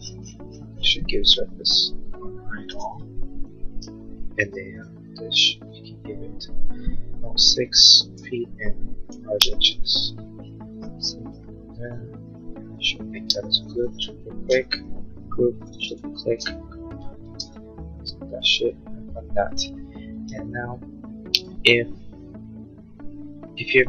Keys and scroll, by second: 3.2 shift+u, 4.2 p, 8.2 6, 8.6 ', 9.4 5, 9.8 Return, 13.5 space, 17.7 space.